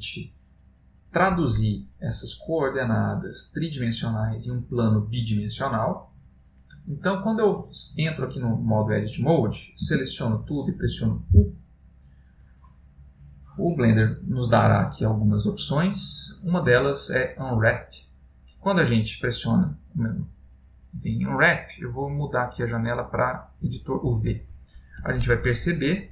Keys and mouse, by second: 0.1 middle click, 3.4 middle click, 4.4 middle click, 6.2 middle click, 11.0 a, 11.5 u, 21.4 click, 25.3 ctrl+middle click.